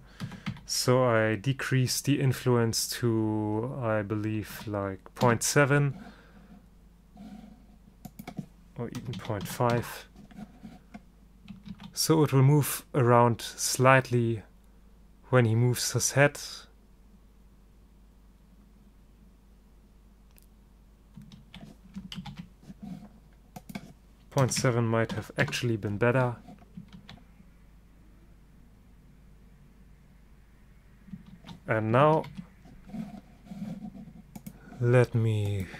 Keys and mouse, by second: 8.2-10.0 drag, 11.8 alt+a, 21.5 alt+a, 22.3 ctrl+shift+i, 23.7-25.5 drag, 27.1 alt+a, 31.5 alt+a.